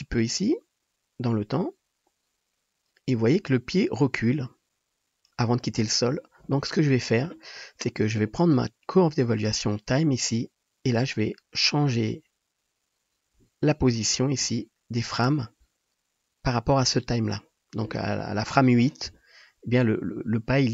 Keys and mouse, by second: 8.8-11.3 middle drag, 11.3-20.7 shift+drag.